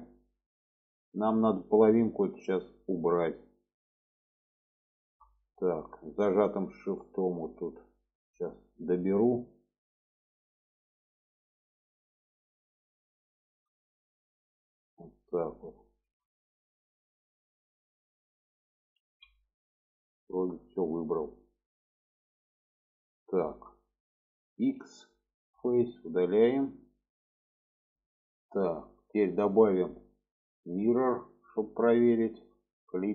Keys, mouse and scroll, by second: 0.5-4.0 drag, 4.9 shift+middle click, 6.2-8.1 shift+drag, 8.5 shift+middle click, 9.2-10.8 shift+drag, 12.1 shift+click, 13.5 shift+middle click, 14.2-15.9 shift+drag, 17.0 shift+middle click, 17.4-18.9 middle drag, 19.1 alt+z, 19.5-20.5 middle drag, 20.8 shift+middle click, 22.9 shift+middle click, 23.3 middle click, 24.9 x, 26.0 middle click, 29.6-31.6 drag, 32.3 shift+middle click.